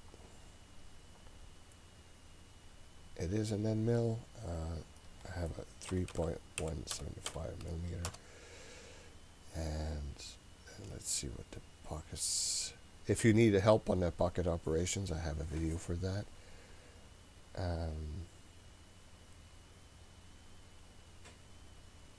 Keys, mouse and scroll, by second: 0.4 scroll down 1, 2.5-4.2 scroll down 1, 4.6-8.6 drag, 9.1-10.9 scroll up 7, 10.9-15.2 scroll up 5.